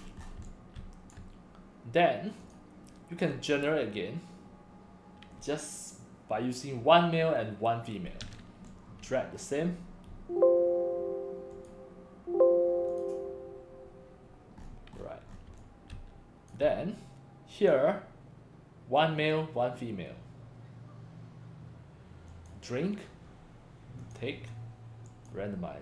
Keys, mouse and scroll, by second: 0.2 scroll down 5, 0.4 x, 0.4 click, 0.8 c, 2.4 click, 8.7 click, 11.5 click, 12.9 click, 14.6-15.4 scroll up 5, 15.5 x, 15.6-16.5 drag, 15.9 c, 17.5 click, 22.3 click, 24.0 click, 25.1 click.